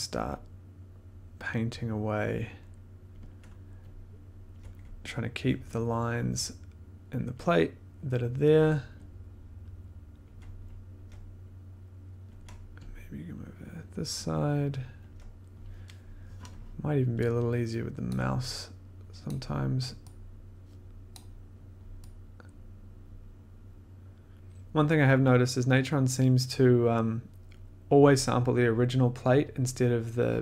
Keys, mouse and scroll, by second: 3.1 click, 4.5 ctrl+click, 5.4 click, 6.1 click, 7.3 click, 8.9 click, 10.2 click, 10.9 ctrl+click, 14.0 click, 15.1 ctrl+click, 18.0 ctrl+click, 19.2 click, 21.0 click, 24.6 ctrl+z.